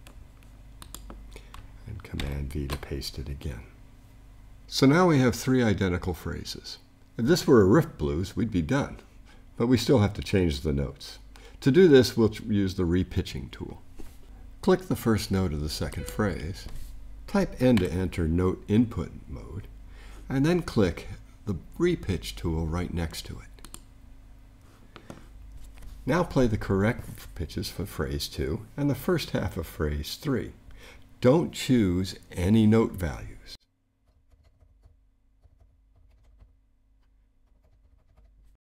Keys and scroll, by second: 2.2 super+v.